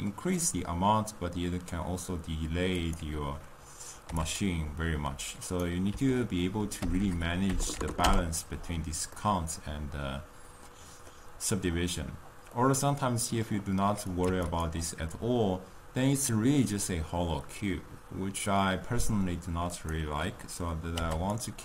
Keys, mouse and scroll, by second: 4.4 click, 8.1 BackSpace, 9.0-14.5 middle drag, 14.5 click, 15.1-18.1 middle drag, 21.3 click.